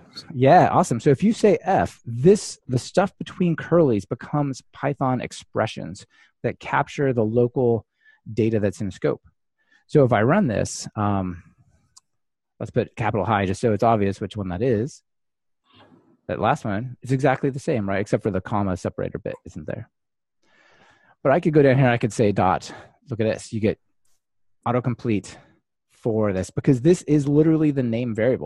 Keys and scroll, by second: 14.8 ctrl+r.